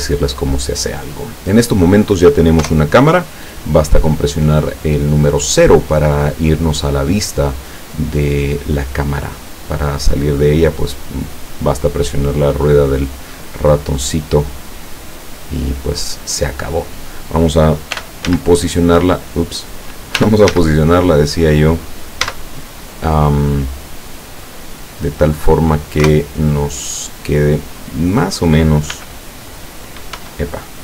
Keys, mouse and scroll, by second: 2.6 KP_0, 9.4 middle click, 9.6-10.2 scroll down 2, 10.3-12.1 middle drag, 13.1 right click, 13.5-14.7 middle drag, 15.4-17.1 drag, 18.0 t, 18.3 z, 20.2 r, 20.5 z, 21.7 click, 22.3 z, 24.2 click, 25.0 click, 26.0 KP_0, 28.0 right click, 29.0 g, 30.3 Escape.